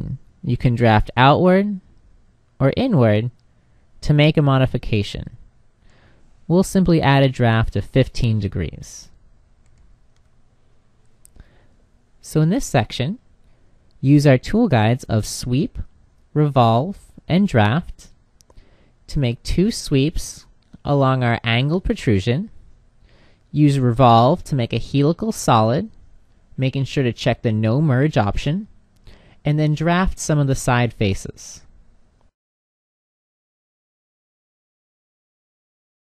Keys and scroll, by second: 9.7 h.